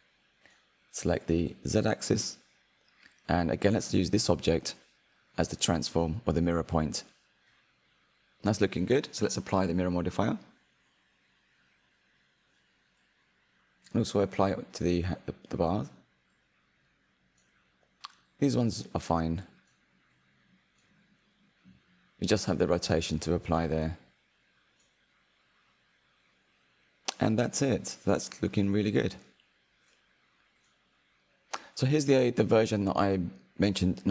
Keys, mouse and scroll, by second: 0.3-1.2 drag, 3.5 click, 4.2 click, 5.8 click, 8.2 click, 8.5-10.6 middle drag, 10.6 click, 12.8-14.7 drag, 16.4-18.4 drag, 18.7 scroll down 2, 19.1-20.1 middle drag, 20.1 click, 21.3 click, 22.3 click, 23.6 click, 27.0 ctrl+a, 29.1 click, 29.6 click, 30.7 click, 31.4 click, 32.4 click, 32.7-34.1 middle drag.